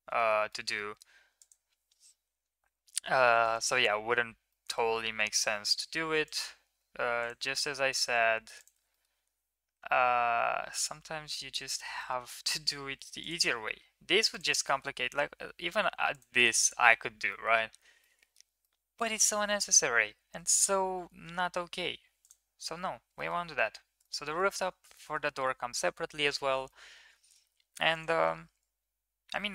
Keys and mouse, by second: 0.0 shift+middle click, 0.3 middle click, 1.2 click, 4.3 middle click, 7.0 ctrl+click, 7.4 middle click, 8.7 middle drag, 9.5 e, 11.8 middle click, 13.0 click, 14.5 middle click, 14.9 e, 16.4 Tab, 17.1 middle drag, 17.8-18.2 middle drag, 18.5-19.4 middle drag, 19.7 ctrl+z, 20.0 ctrl+z, 20.2 ctrl+z, 20.3 ctrl+z, 20.5 ctrl+z, 21.1 ctrl+z, 21.6 Tab, 22.0 click, 23.0 middle click, 23.3 ctrl+s, 23.8 shift+middle click, 24.1 middle click, 24.4 ctrl+s, 24.8 middle drag, 25.1 middle click, 26.5-27.2 middle drag, 27.7 click.